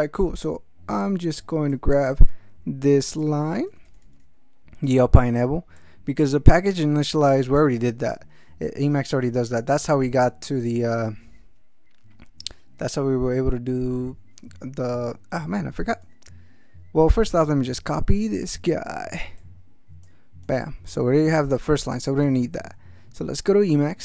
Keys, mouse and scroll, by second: 1.7-3.4 drag, 3.7 ctrl+c, 5.8 click, 16.0 alt+Tab, 17.6 alt+Tab, 19.4 click, 20.4 ctrl+c, 22.2 alt+Tab.